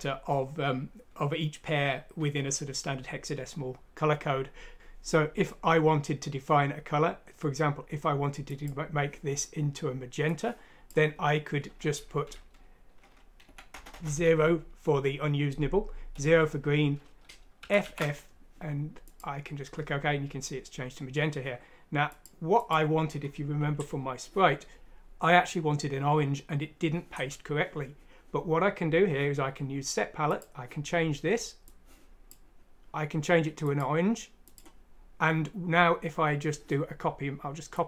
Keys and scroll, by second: 4.7 Escape, 4.7 BackSpace, 13.9 BackSpace, 14.0 0, 16.1 0, 17.5 typing.